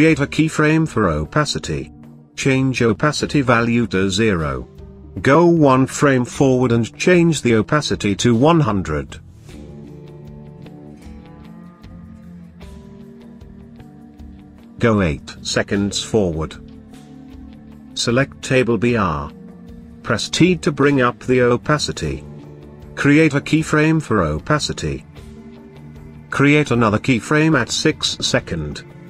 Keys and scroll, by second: 20.0 t.